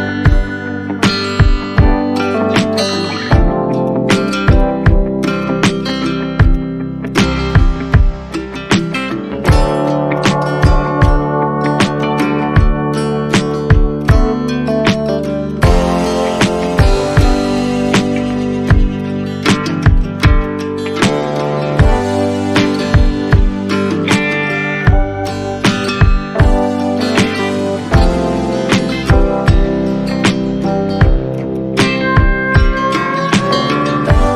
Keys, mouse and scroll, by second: 1.9-2.2 scroll down 1, 2.3 alt+middle click, 2.5 scroll down 1, 3.5 alt+click, 3.8 shift+click, 4.4 scroll down 1, 7.7-8.3 scroll up 1, 8.5-8.9 scroll down 1, 9.1 alt+middle click, 10.0 scroll up 1, 10.1 shift+click, 12.8-13.3 scroll down 1, 13.3 right click, 16.5 right click, 16.6 alt+click, 19.0 right click, 21.1-21.4 scroll up 1, 22.5 right click, 26.4 shift+click, 26.8 scroll down 1, 27.3 alt+middle click, 33.8 shift+click.